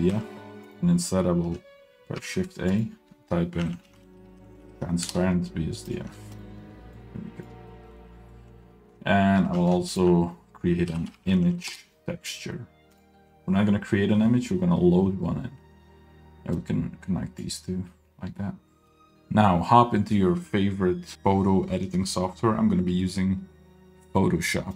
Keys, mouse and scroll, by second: 0.3 x, 0.8 click, 2.2 shift+a, 6.5 ctrl+shift+click, 7.1 click, 7.7 middle click, 7.9-9.3 scroll up 1, 9.5 shift+a, 16.6-17.6 drag, 18.0-18.9 scroll down 3, 18.5 middle click, 18.9 scroll up 2.